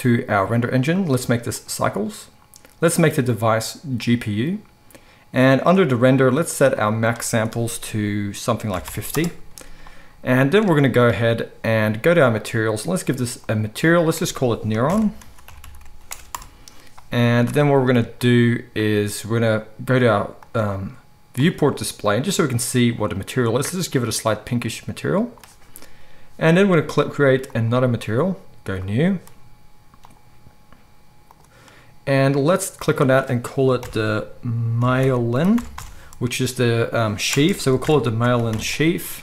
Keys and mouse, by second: 1.0-12.4 drag, 12.4-13.5 middle drag, 13.5-22.1 drag, 22.1-27.5 middle drag, 27.5-30.2 drag, 31.4-39.2 drag.